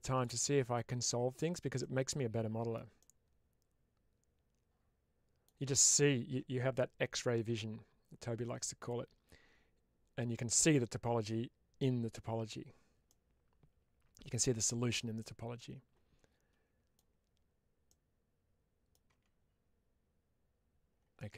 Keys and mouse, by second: 0.0-1.4 drag, 1.7 middle click, 2.9-5.3 middle drag, 12.9-14.2 middle drag, 15.1-16.8 middle drag, 17.7-18.8 middle drag, 21.0-21.3 middle drag.